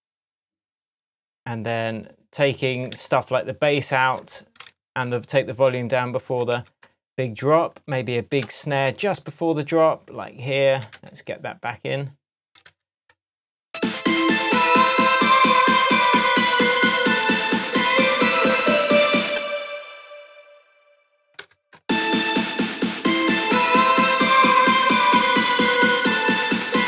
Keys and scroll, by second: 3.0 super+d, 6.6 super+d, 8.4 BackSpace, 11.0 super+c, 12.7 super+v, 19.2 space, 21.4 BackSpace, 26.6 BackSpace.